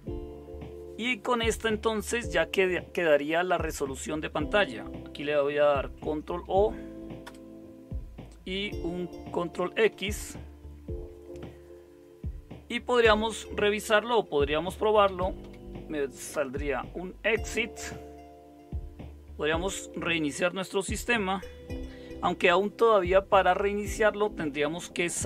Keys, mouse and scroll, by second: 5.9 ctrl+o, 7.2 Return, 9.9 ctrl+x, 14.6-15.9 typing, 16.3 Return.